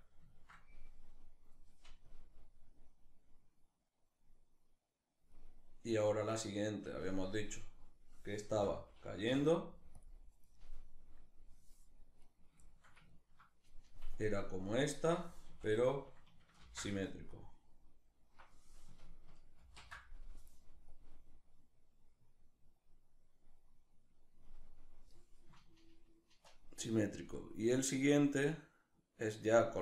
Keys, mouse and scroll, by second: 1.7-11.9 drag, 8.1 a, 11.9 right click, 12.3-13.8 shift+middle drag, 13.8-25.3 drag, 15.1 a, 19.2 ctrl+shift+v, 25.3-29.8 shift+middle drag.